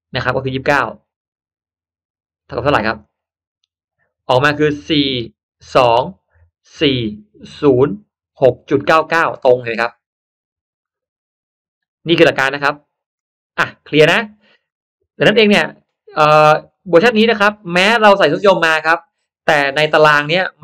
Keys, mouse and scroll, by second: 2.9 click, 13.0 click, 15.2 click, 16.6 click, 18.0 click.